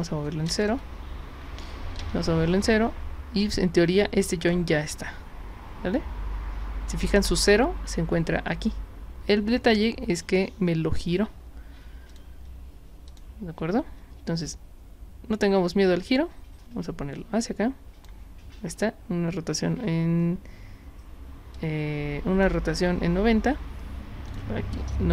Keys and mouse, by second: 1.5 Tab, 2.4 Tab, 11.1 e, 12.1 click, 13.1 click, 13.6 w, 14.0 e, 15.5-18.0 drag, 21.6 click, 24.3 click.